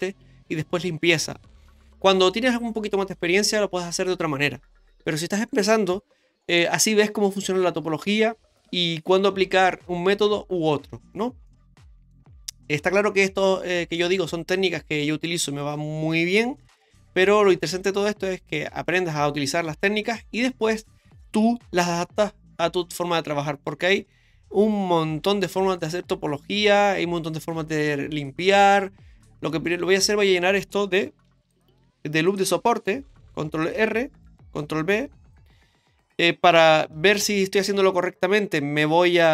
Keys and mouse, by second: 11.5 middle click, 29.2 middle click, 31.3 ctrl+r, 32.5 ctrl+z, 33.4 ctrl+r, 34.6 ctrl+b, 37.1 ctrl+space.